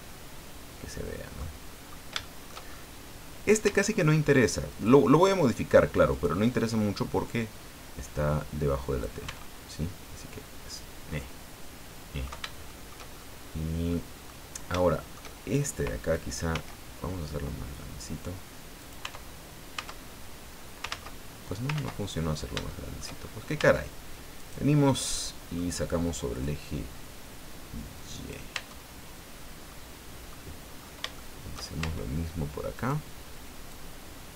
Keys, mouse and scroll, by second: 1.6-2.1 scroll up 2, 2.2 shift+middle click, 2.6-3.0 shift+scroll up 1, 3.6 Tab, 4.7 right click, 6.1 right click, 7.2-9.2 drag, 9.2 Tab, 10.0-10.8 scroll down 4, 11.1-12.4 middle drag, 12.7 shift+middle click, 13.1 shift+scroll up 2, 13.9 middle click, 14.5 scroll down 2, 14.8 shift+middle click, 16.5 s, 18.8 click, 19.0 Tab, 19.7 Tab, 20.2-20.5 scroll down 1, 20.9 ctrl+z, 21.7 ctrl+z, 22.2-22.6 ctrl+scroll up 1, 22.7 shift+middle click, 23.2 shift+scroll up 1, 23.6 Tab, 24.3 right click, 25.1 middle click, 26.4-28.5 drag, 28.5 Tab, 28.9-29.7 scroll down 1, 29.7 middle click, 30.7-31.1 scroll up 3, 31.2 shift+middle click, 31.8 shift+Tab, 32.7 right click, 33.7-34.3 drag.